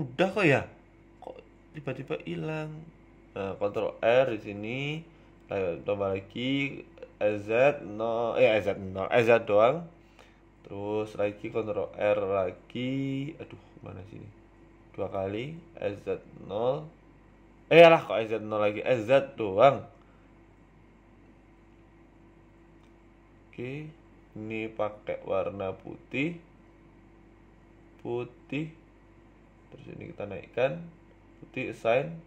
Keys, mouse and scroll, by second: 1.0 ctrl+r, 3.7 s, 6.4 g, 8.1 s, 9.2 ctrl+r, 13.7 s, 15.2 g, 16.7 s, 19.6 click, 20.3 a, 20.4 a, 20.6 c, 22.8 scroll up 3, 23.7 click, 23.7 scroll up 2, 24.2 click, 27.9 click, 29.1 click, 30.6 click, 30.6 a, 30.7 a, 32.0 right click.